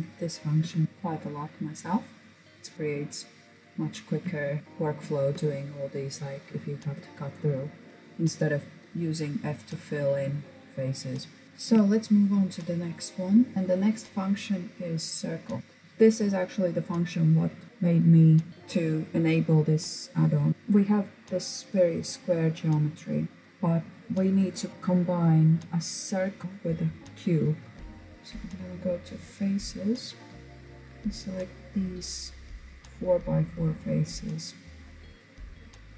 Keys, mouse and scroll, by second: 1.6 click, 2.3-2.7 scroll down 1, 2.7 right click, 3.3 scroll down 2, 3.4-4.3 shift+middle drag, 4.3 scroll up 2, 4.6-6.0 shift+middle drag, 10.5 click, 10.8-11.2 scroll down 2, 11.2-12.5 shift+middle drag, 12.5 click, 13.5-14.6 shift+middle drag, 20.5-21.6 middle drag, 27.7 KP_7, 27.9-29.5 drag.